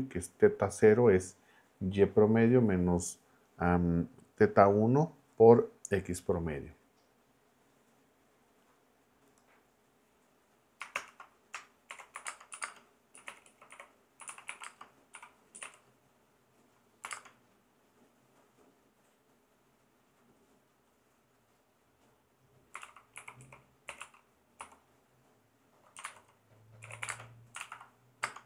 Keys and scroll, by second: 10.9 shift+Return, 11.6-17.1 typing, 22.5-24.6 typing, 26.6-28.4 typing, 27.6 super+Right.